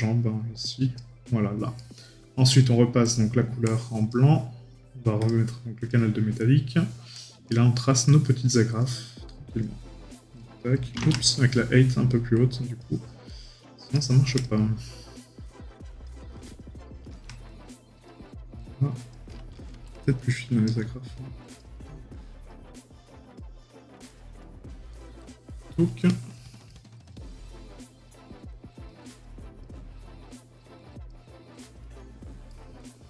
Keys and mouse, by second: 1.8 right click, 7.5 right click, 8.5 middle click, 11.2 right click, 24.9 right click, 25.5 middle click, 26.9 right click, 32.5 right click, 32.8 middle click.